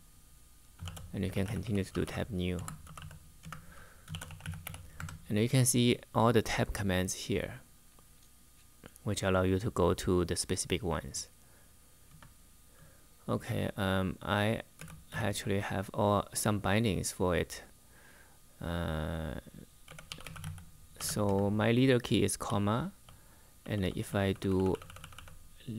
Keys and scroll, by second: 0.3-4.9 typing, 11.8 Return, 14.2-15.3 typing, 19.3-25.7 typing.